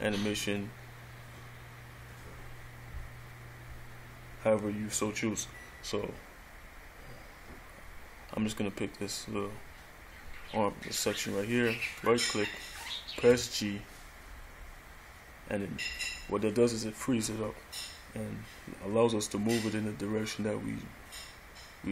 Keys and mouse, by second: 12.2 right click, 13.5 g.